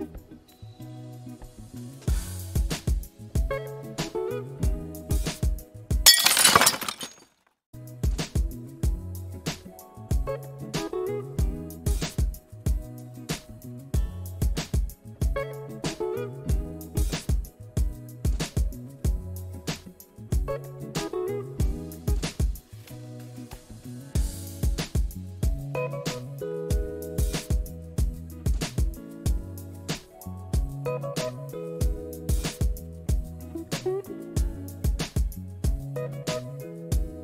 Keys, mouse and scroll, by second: 5.8 t.